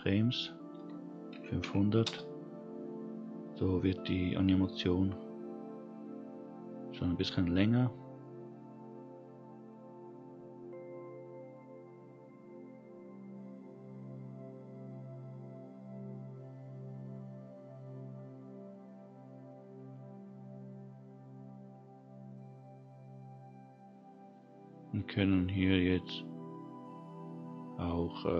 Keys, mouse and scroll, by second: 1.6 0, 10.2-11.1 scroll down 1, 11.1-14.5 scroll down 1, 14.5-16.4 scroll down 3, 17.0-19.5 scroll down 2, 19.5-21.8 scroll down 2, 22.9-25.5 scroll down 3.